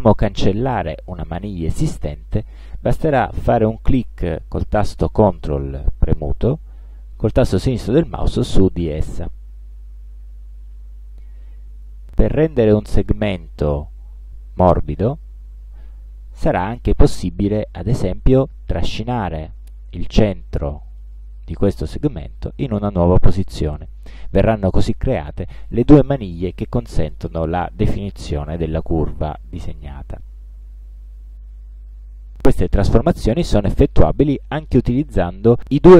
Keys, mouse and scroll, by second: 8.6 ctrl+click, 19.2-21.9 drag.